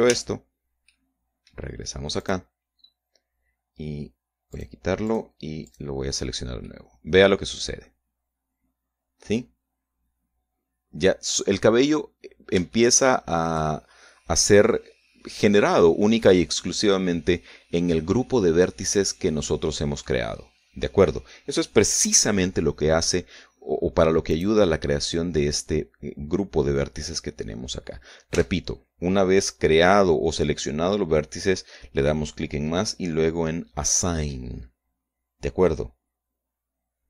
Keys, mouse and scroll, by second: 0.9 Tab, 1.6 middle click, 2.9 click, 3.5-3.8 scroll down 1, 5.3 click, 5.8 click, 6.4 click, 7.4-12.3 middle drag, 12.5 scroll up 1, 13.3 shift+scroll up 1, 13.5 shift+middle click, 16.9-21.0 middle drag, 25.1 click, 29.1 Tab.